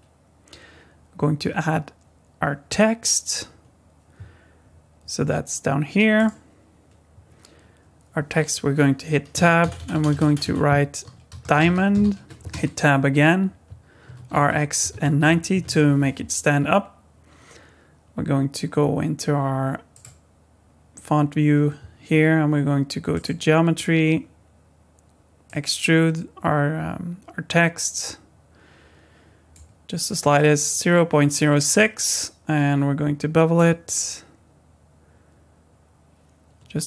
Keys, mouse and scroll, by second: 9.3 Tab, 9.6-12.0 typing, 12.5 Tab, 14.0 r, 19.9 click, 23.1 click, 25.5 click, 33.5 click.